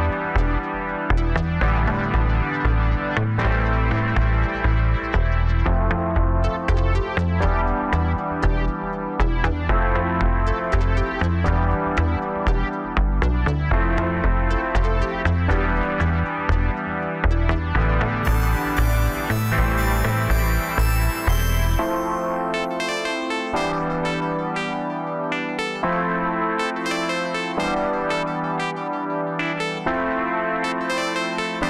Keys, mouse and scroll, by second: 1.3-2.1 scroll down 1, 2.1 ctrl+r, 4.3-5.3 middle drag, 5.3 3, 5.6 click, 6.4 KP_1, 7.1 e, 9.8-10.8 middle drag, 10.8 2, 11.3 click, 12.1 KP_1, 12.9 g, 16.3 middle click, 17.1 click, 17.9 KP_1, 18.5 g, 20.8-21.1 scroll up 1, 21.1 scroll down 2, 21.4-22.6 middle drag, 22.6 Tab, 23.5 KP_7, 24.8 s, 28.6-30.0 middle drag, 30.0 ctrl+a.